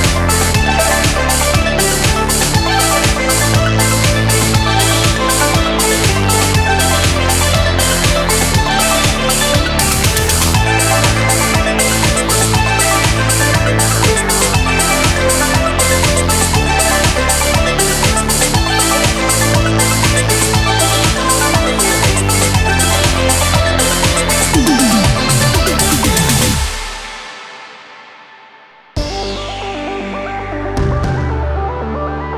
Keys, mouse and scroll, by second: 0.0 click, 0.2 shift+click, 0.5 super+z, 0.6-1.0 ctrl+super+drag, 0.8 super+z, 1.0 middle click, 1.5 ctrl+super+click, 1.6 super+z, 2.7 ctrl+click, 3.4 ctrl+click, 4.4 super+z, 4.5 click, 4.7 KP_7, 4.8 click, 5.8 shift+drag, 6.3 shift+click, 7.7 a, 8.0 click, 8.4 super+z, 8.4 click, 8.5 shift+KP_7, 8.8 super+click, 9.5 super+z, 9.6 click, 10.6 KP_7, 10.9 a, 12.3 KP_7, 12.4 ctrl+KP_1, 12.5 click, 13.1 super+KP_7, 13.3 super+click, 13.4 super+z, 13.5 click, 14.2 KP_7, 15.1 click, 15.1 KP_3, 15.8 click, 15.8 KP_7, 16.3 click, 17.1 super+z, 18.7 a, 18.8 alt+n, 19.0 alt+n, 19.7 a, 20.2 click, 20.2 BackSpace, 20.4 super+z, 21.2 super+z, 21.9 shift+super+z, 22.0 shift+super+z, 22.3 click, 22.4 KP_7, 23.9 KP_7, 24.9 click, 26.3 super+z, 27.0 super+z, 27.3 KP_7, 27.5 click, 29.3 KP_7, 29.7 click, 29.7 KP_3, 31.2 click, 31.9 click.